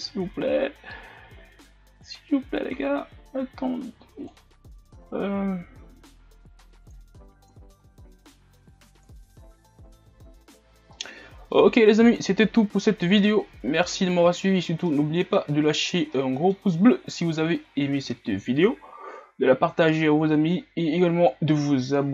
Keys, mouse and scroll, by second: 2.4-5.3 drag, 5.3-5.8 scroll down 1, 9.2-10.7 drag, 10.7-11.2 scroll up 6, 11.2-12.3 middle drag, 12.3-13.3 scroll down 2, 13.3-15.7 middle drag, 15.7-16.4 scroll down 2, 16.4-16.9 middle drag, 16.9-17.7 scroll up 4, 17.7-19.7 scroll down 1, 19.7 scroll down 2, 19.9 KP_0.